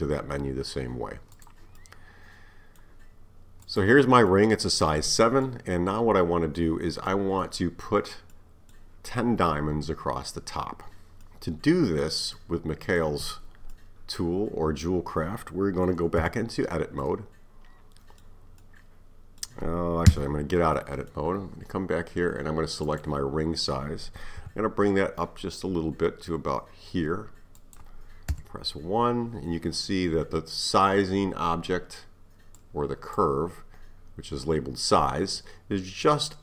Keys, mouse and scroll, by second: 1.4 click, 1.8-3.6 middle drag, 3.6 click, 4.3-5.0 middle drag, 5.0-5.5 scroll up 2, 5.5-7.4 middle drag, 7.4 scroll up 1, 7.5-16.2 middle drag, 16.2 Tab, 17.0-20.1 middle drag, 20.1 Tab, 20.8-22.1 middle drag, 22.1-22.9 scroll down 3, 22.9 click, 24.4 s, 28.3 KP_1, 32.6-35.6 drag.